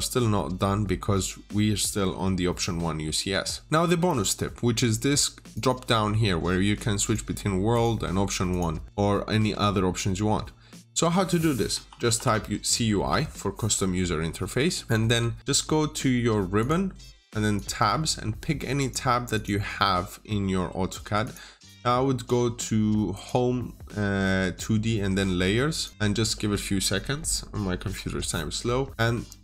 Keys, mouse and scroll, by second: 3.7 click, 11.6 click, 11.8 typing, 12.8 Return, 16.5 click, 28.9 Return, 29.1-29.4 scroll up 1.